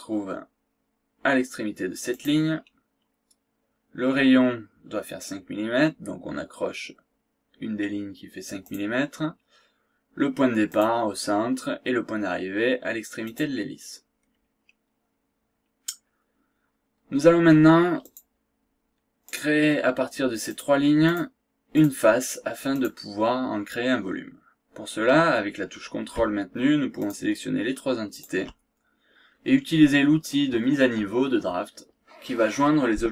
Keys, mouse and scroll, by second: 0.6 scroll up 2, 2.1 click, 2.5 scroll down 2, 2.7 scroll up 2, 8.6 click, 10.7 click, 13.2 click, 14.3 scroll down 1, 15.5 scroll down 1, 15.8-16.2 scroll up 1, 18.0 click, 19.2 click, 20.6 click, 21.1 click, 21.7 click, 22.7 click, 27.0 ctrl+click, 28.1 ctrl+click.